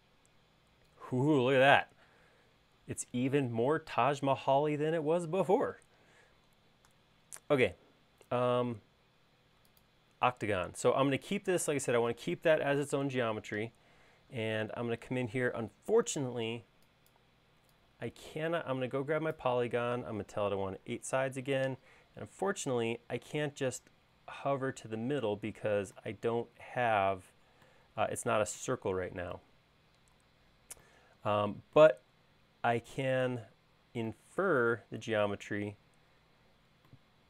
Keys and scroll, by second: 20.9 8, 21.0 Return, 35.6 l.